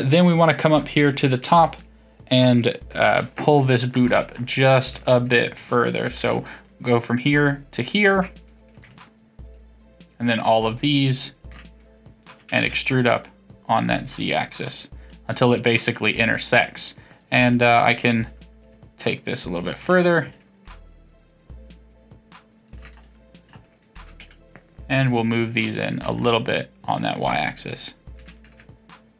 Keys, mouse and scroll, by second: 1.8-4.3 middle drag, 3.8-4.7 scroll up 4, 4.7-6.0 shift+middle drag, 6.0 click, 7.7 ctrl+click, 8.9 shift+click, 9.4 shift+click, 11.1 shift+click, 12.3 e, 15.1-17.1 middle drag, 17.1 click, 17.5-19.6 middle drag, 19.6 shift+click, 20.0-22.5 middle drag, 22.5 shift+click, 23.0-24.0 middle drag, 24.0 g, 27.5 click, 28.2 g.